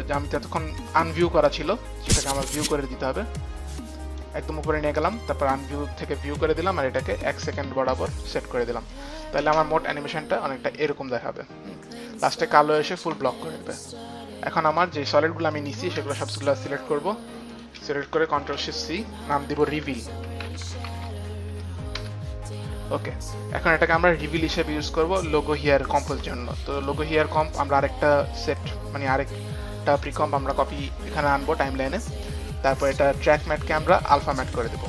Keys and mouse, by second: 1.3 click, 1.9 click, 5.0 click, 5.7 click, 6.7 click, 8.9 click, 10.9 click, 12.5 space, 14.6 click, 15.2 click, 15.5 click, 17.7 shift+click, 18.5 ctrl+shift+c, 18.5 shift+click, 19.5-21.4 typing, 20.5 shift+click, 22.0 Return, 24.7 a, 25.2 Return, 26.7 click, 27.9 click, 33.4 click, 34.3 click.